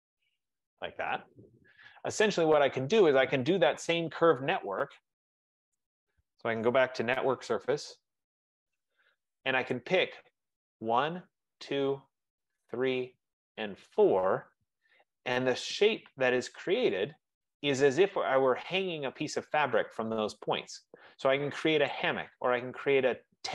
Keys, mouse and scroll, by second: 0.7 click, 2.0 middle click, 2.2 middle click, 5.9 right click, 7.2-10.1 typing, 9.9 right click, 11.0 click, 11.8 click, 12.9 click, 13.9 click, 15.0 Return, 17.0 click, 19.6 right click, 20.6 middle click, 22.1 right click, 22.8 middle click, 23.0 middle click.